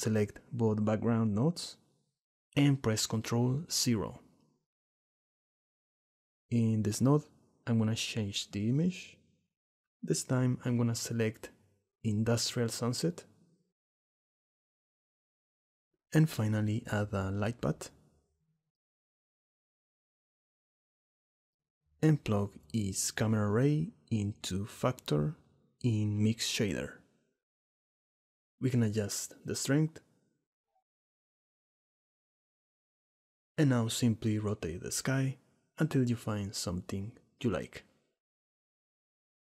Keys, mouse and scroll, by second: 2.8 ctrl+KP_0, 5.9 click, 7.7 click, 16.3 click, 17.6 shift+a, 22.8 click, 24.0-25.5 drag, 29.3 shift+middle click, 30.5 shift+middle click, 31.0 shift+middle click, 32.6 middle click, 33.2-34.5 drag, 34.9 click, 36.5 click, 36.9 right click, 37.8-38.7 middle drag, 39.4 right click.